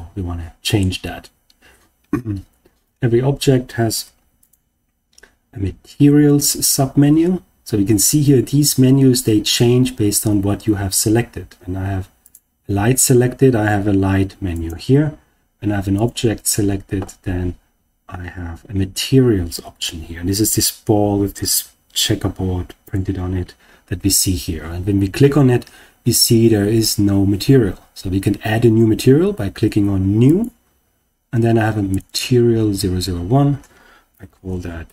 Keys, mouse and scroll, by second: 3.9 Tab, 4.3 click, 12.1 click, 14.5 click, 15.9 click, 22.8 click, 30.2 click, 31.8 click, 32.0-34.9 drag.